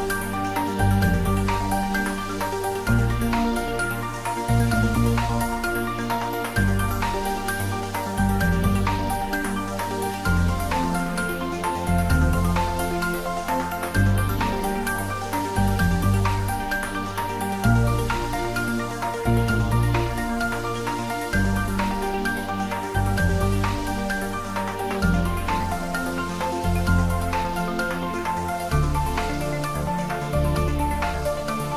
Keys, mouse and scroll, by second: 1.1 click, 5.2 KP_3, 5.9-6.6 scroll down 1, 7.4 g, 9.6-12.2 drag, 12.2 g, 17.6 click, 20.6 g, 20.9 y, 22.3 click, 24.9 g, 25.3 x, 25.9 Right, 27.5 click, 30.5 scroll down 1, 31.1 middle click.